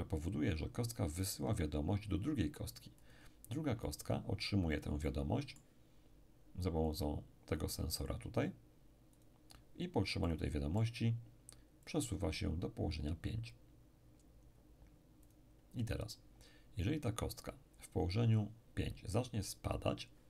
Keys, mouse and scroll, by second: 3.0-4.9 drag, 3.9 right click, 5.0-6.5 middle drag, 6.9 click, 9.1 click, 11.9 click, 15.3 click.